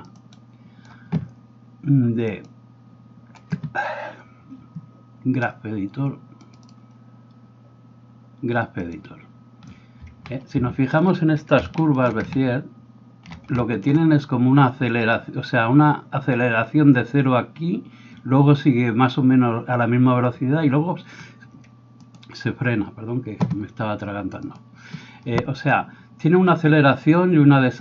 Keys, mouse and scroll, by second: 11.9 ctrl+shift+middle click, 13.5 shift+middle click, 22.1-27.8 middle drag, 22.1 right click.